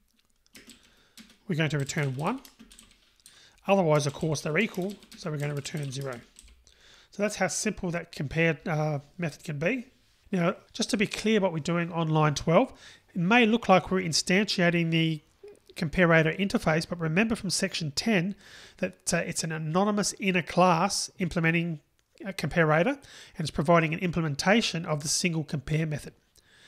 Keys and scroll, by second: 1.0 Return.